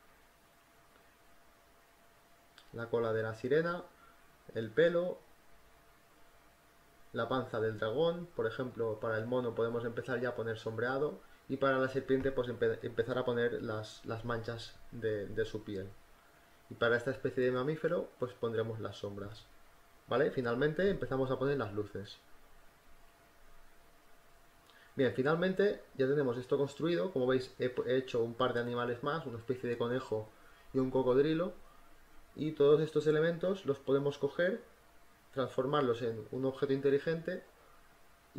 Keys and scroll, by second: 0.0-1.5 typing, 4.6 space, 6.4-9.6 typing, 8.7 ctrl+z, 11.4-15.5 typing, 17.0-18.5 typing, 21.2 ctrl+z, 23.2 z, 23.3 space, 23.7 v, 23.9 space, 32.6 space, 37.5 ctrl+t.